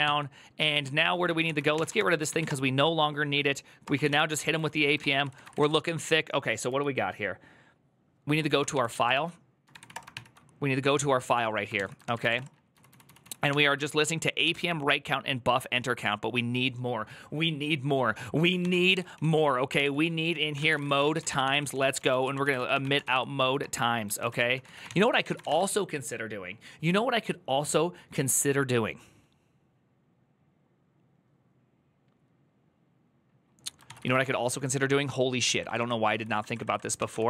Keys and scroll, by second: 1.1 ctrl+e, 1.3-6.7 typing, 8.5 ctrl+s, 8.9 ctrl+e, 9.2-10.0 typing, 11.5 ctrl+t, 11.7-15.3 typing, 19.1-25.7 typing, 24.6 ctrl+c, 33.6 ctrl+c, 33.8-37.2 typing.